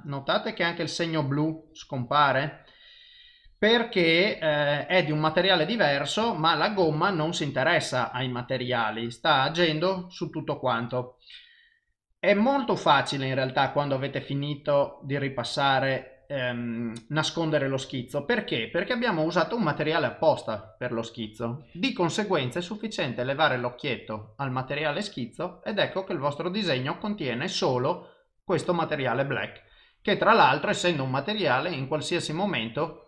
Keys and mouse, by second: 6.9 ctrl+z, 7.6 click, 10.3 ctrl+z, 23.9 click, 30.8 click.